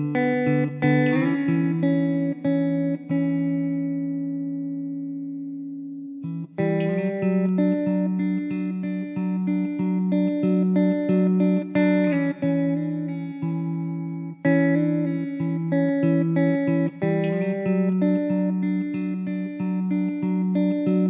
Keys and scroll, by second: 0.0 s, 2.8 s, 4.4 `, 5.5 s, 6.7 s, 11.8 shift+d, 13.2 r, 14.9 `, 19.0 s.